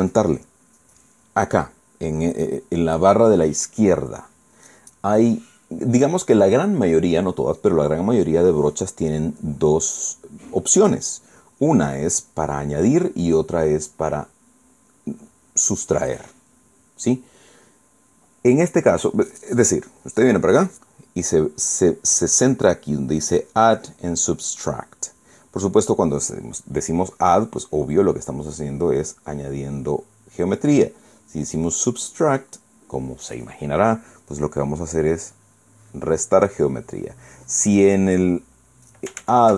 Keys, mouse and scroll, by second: 12.0 click, 28.4-29.5 drag, 29.6 click, 32.9 click, 36.1-39.2 drag.